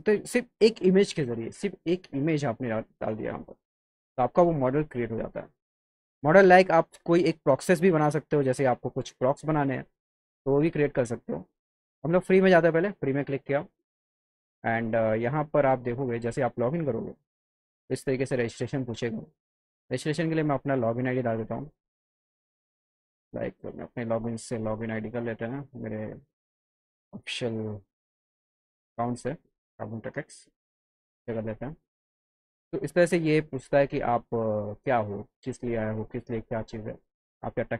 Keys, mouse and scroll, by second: 12.3 click, 23.5 click, 25.9 click.